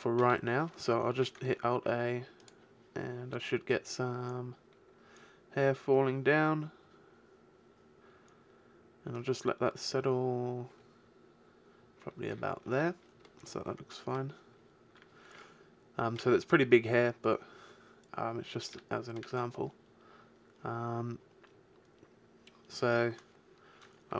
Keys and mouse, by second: 1.1 alt+a, 7.3-9.1 middle drag, 12.7 alt+a.